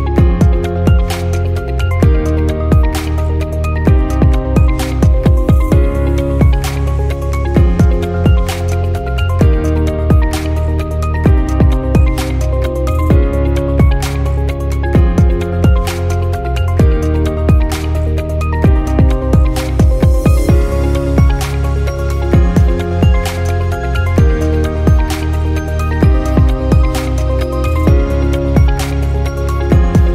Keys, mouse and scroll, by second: 0.3 click, 1.2-1.8 scroll down 2, 1.8-4.3 shift+middle drag, 5.3 click, 9.7-10.3 drag, 11.8-12.4 drag, 14.5 click, 17.0-17.9 middle drag, 17.9 scroll down 4, 18.8-20.8 middle drag, 21.0-21.4 scroll up 3, 21.4-21.9 middle drag, 21.9-22.4 scroll up 1, 22.4 click, 22.8 shift+click, 23.8 click, 24.9 g, 27.5 click, 27.9-30.1 middle drag.